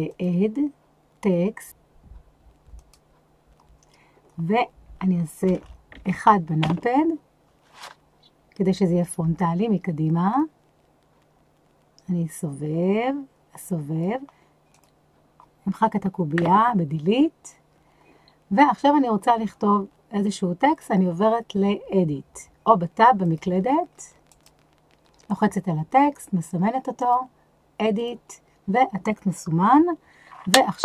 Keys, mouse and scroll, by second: 0.1-3.0 drag, 5.6 KP_0, 6.6 KP_1, 10.3-14.0 drag, 14.7 click, 16.3 Delete, 23.2-24.4 drag, 25.3 click, 27.0-28.1 drag.